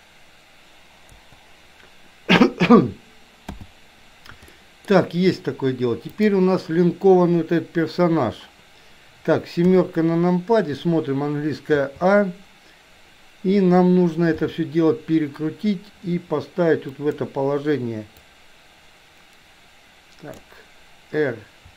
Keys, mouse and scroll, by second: 1.2 Delete, 3.5 n, 4.7 shift+middle click, 6.2 click, 9.7 KP_7, 11.8 a, 14.4 r, 18.3-20.5 drag.